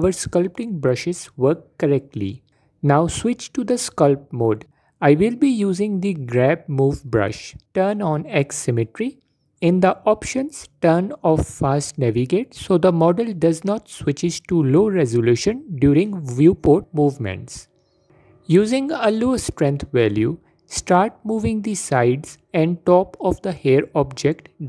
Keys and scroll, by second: 4.1 Tab, 19.9 f, 21.5 f.